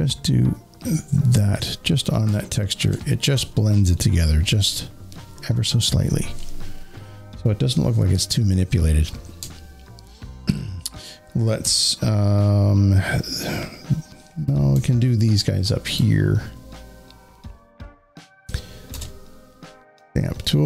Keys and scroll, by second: 2.1 z, 3.2 space, 3.3 space, 3.4 space, 18.7 alt+s.